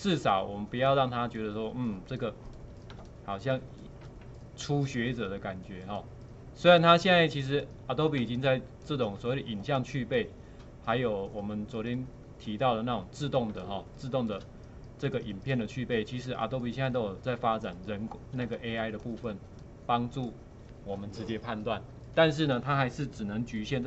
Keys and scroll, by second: 3.0 space, 8.3 space, 13.6 space, 18.5 space.